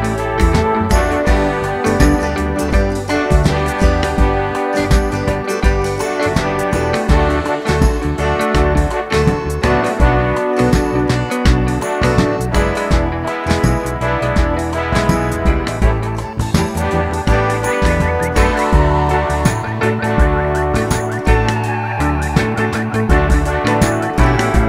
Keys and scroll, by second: 16.6 d.